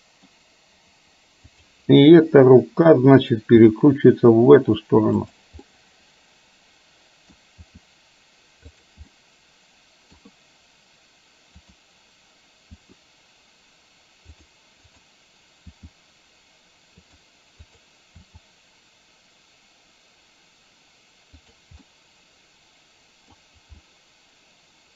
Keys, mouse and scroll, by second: 1.6 click, 2.3 KP_7, 3.6 r, 5.6-7.5 middle drag, 7.8 r, 9.1-10.3 middle drag, 11.8 click, 12.8 r, 14.9 click, 15.8 r, 18.9 r, 21.9-23.5 middle drag, 23.9-24.9 middle drag.